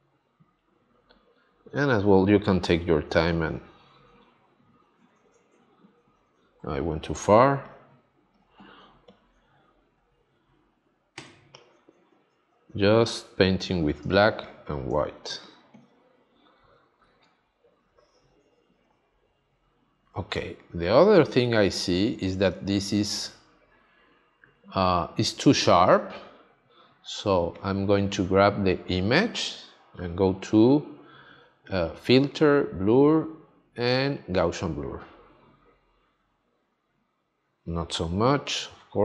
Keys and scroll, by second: 7.2 x, 11.1 x, 14.1 space, 20.3 space.